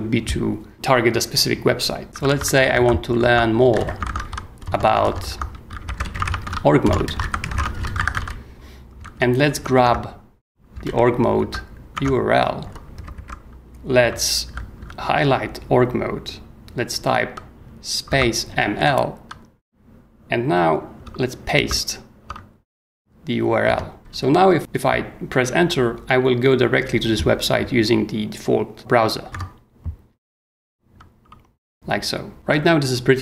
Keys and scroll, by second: 2.0-8.6 typing, 9.0 super+., 9.0 super+Tab, 10.8 super+l, 11.4 super+c, 11.9 super+Tab, 13.0 b, 14.0 v, 14.5 e, 18.1 space, 18.4 m, 18.7 shift+i, 21.6 ctrl+v, 23.7 Return, 24.0 h, 29.3 Return, 31.7 super+Tab.